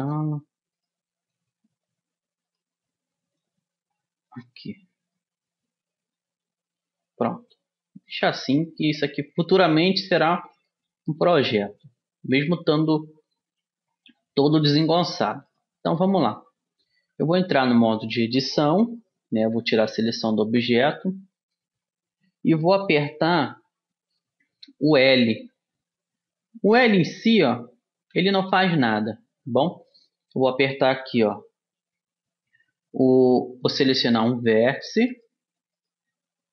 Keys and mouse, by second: 1.1 right click, 1.7-3.7 drag, 3.7 right click, 3.9 click, 4.5 middle click, 4.7 click, 5.1-6.9 middle drag, 8.9-13.5 middle drag, 11.9 s, 15.1 middle click, 17.3 Tab, 19.9 a, 25.9 l, 27.5 l, 28.5 l, 28.9 l, 34.5-36.5 right drag.